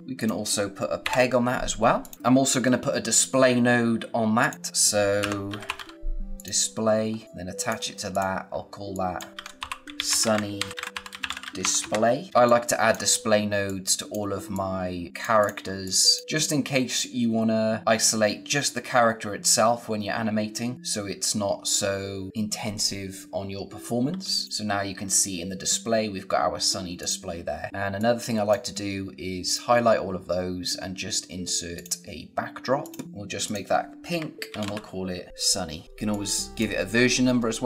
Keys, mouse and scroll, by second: 0.0 click, 0.9 ctrl+p, 1.9 click, 2.4 scroll up 1, 4.3 click, 5.1 Return, 5.2-6.2 typing, 6.3 click, 7.0 scroll down 1, 7.2 click, 9.1-12.7 typing, 12.4 click, 13.1-13.6 scroll up 1, 13.6 click, 24.4 click, 26.9 click, 27.7 scroll up 1, 27.9 click, 31.7 click, 34.2-35.3 typing, 35.8 scroll up 1, 36.0 click, 36.8-37.3 scroll down 1, 37.3 space, 37.4 click.